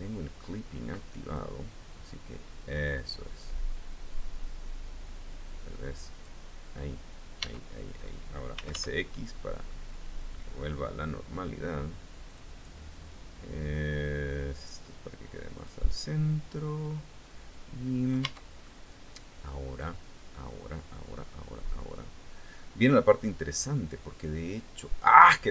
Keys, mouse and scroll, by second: 0.9-6.0 drag, 7.0 Tab, 7.8-8.7 typing, 11.8 click, 13.3-15.4 drag, 15.6-17.8 middle drag, 17.8 Tab, 18.2-24.7 middle drag.